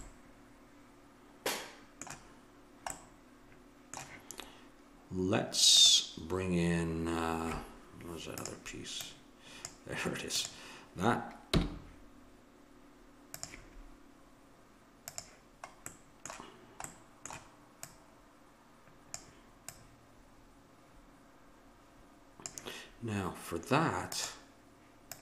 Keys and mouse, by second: 0.0 middle click, 5.7-7.7 drag, 8.4-12.2 drag, 11.5 m, 15.1-16.9 drag, 16.9-19.1 middle drag, 17.9-19.6 drag, 19.7-21.6 drag.